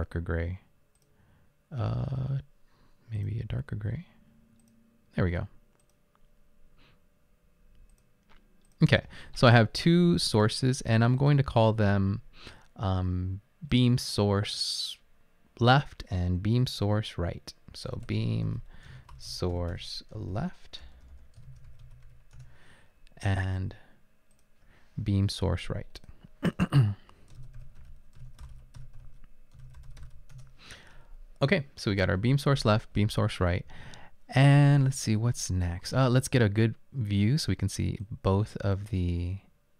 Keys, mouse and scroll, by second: 17.8-22.6 typing, 24.3-25.0 typing, 27.3-30.5 typing, 33.5-34.2 typing.